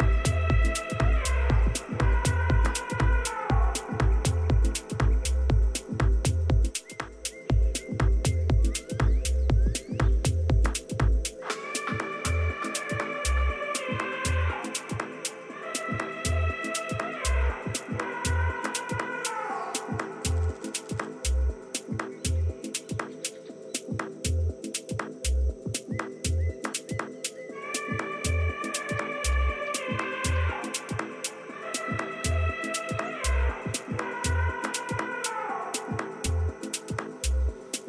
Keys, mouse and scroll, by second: 9.3 Escape, 9.8 Escape, 10.1 Escape, 10.4 Escape, 14.4-18.0 middle drag, 18.3-20.4 middle drag, 23.2-25.3 middle drag, 26.1 KP_1, 32.3-33.5 middle drag, 35.4 KP_3, 36.4 KP_1.